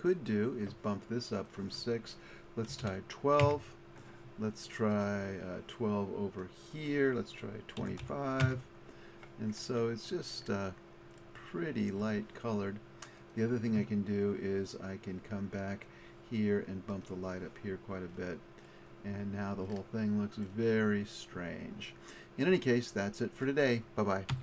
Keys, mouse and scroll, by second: 6.7-7.3 scroll down 1, 10.7-15.2 drag, 15.8-17.0 drag, 19.9 middle click, 20.1 middle click.